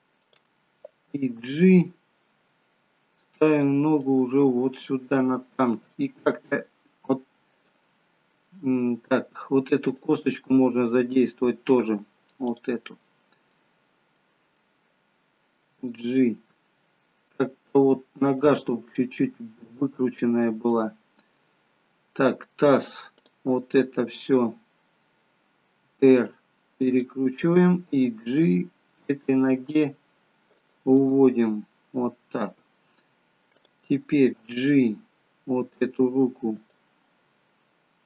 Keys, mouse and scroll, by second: 1.3 g, 4.0 middle click, 6.1 g, 8.0 middle click, 9.8 click, 10.3 middle click, 12.4 click, 12.9 middle click, 13.7 scroll down 2, 14.0 middle click, 15.8 g, 18.7 middle click, 21.1-23.2 scroll up 4, 23.2 click, 24.1-25.9 scroll down 2, 25.9 r, 28.0 g, 31.7 middle click, 33.5 click, 34.5 g, 37.1 middle click.